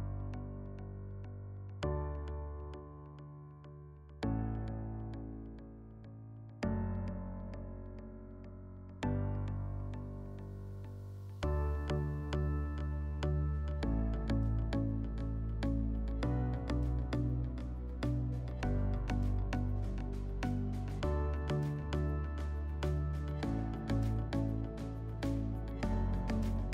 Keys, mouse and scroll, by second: 5.0 alt+w, 6.3 middle click, 7.8 middle drag, 11.8 alt+w, 13.4 alt+middle click, 16.1 click, 17.5 click, 19.5 click, 21.2 click, 23.6-24.7 drag.